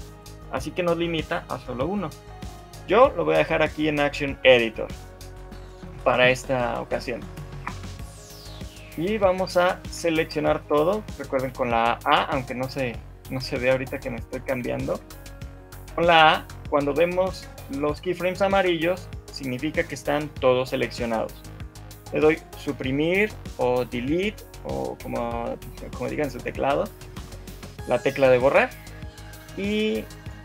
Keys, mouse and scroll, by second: 7.6 shift+Left, 7.6 shift+middle click, 11.4 shift+middle click, 11.4 scroll down 2, 11.4 a, 11.8 a.